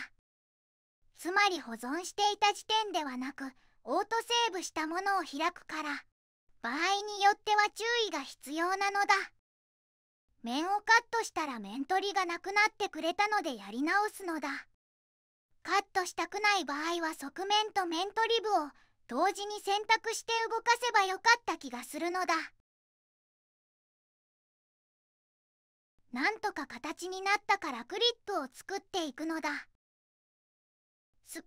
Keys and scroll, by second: 0.4 3, 2.5 Escape, 5.9 2, 6.8 g, 10.5 3, 11.5 x, 12.6 typing, 19.2 2, 21.4 -, 21.9 1, 22.1 0, 22.1 Tab, 22.7 shift+Tab, 23.4-24.6 typing, 24.0 Tab, 24.6 Tab, 24.9 Return, 25.1 Return.